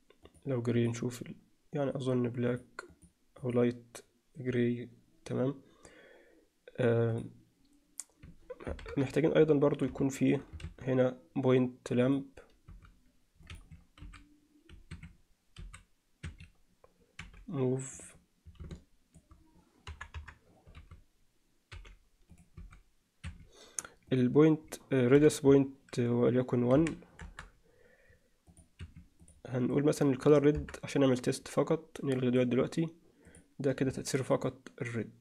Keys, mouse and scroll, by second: 8.7 KP_0, 8.8 KP_7, 10.7 shift+a, 12.7 s, 13.6 Escape, 14.0 s, 15.6 s, 17.2 m, 18.8-19.2 alt+middle drag, 19.9-22.6 typing, 24.1-27.8 drag, 28.6 click, 30.6 KP_0, 32.2 click.